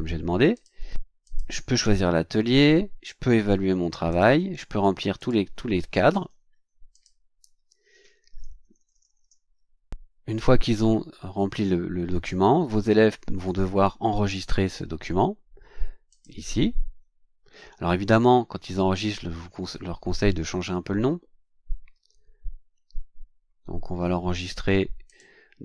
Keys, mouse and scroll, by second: 0.5 click, 1.2 click, 4.1 click, 5.1 click, 6.1 d, 6.9 click, 7.2 d, 8.6 BackSpace, 16.1 click, 25.0 click.